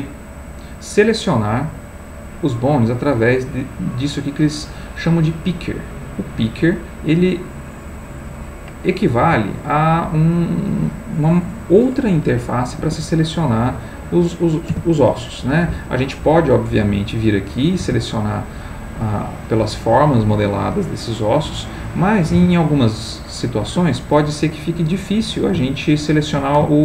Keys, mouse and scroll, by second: 0.8 click, 2.7 click, 3.8 click, 5.8 click, 8.0 click, 9.2 g, 12.8 Escape, 13.8 click, 14.7 g, 15.9 Escape, 17.0 click, 17.8 g, 20.3 Escape, 21.4 click, 22.3 r, 23.6 Escape, 25.7 shift+click, 26.7-26.8 ctrl+shift+drag.